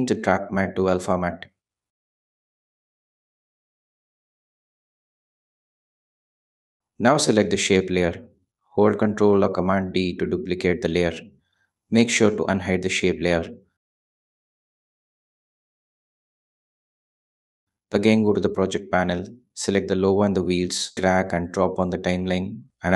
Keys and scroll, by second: 9.1 super+d, 13.7 Return, 14.7 shift+Return, 15.3 shift+m, 15.4 shift+a, 15.6 shift+t, 15.9 shift+e, 17.4 Return.